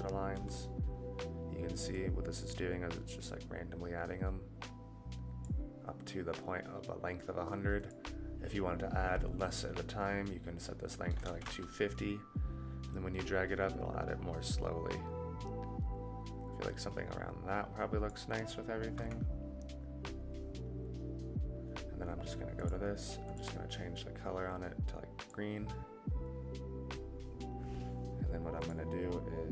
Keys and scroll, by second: 0.3 KP_Divide, 19.0 KP_Divide.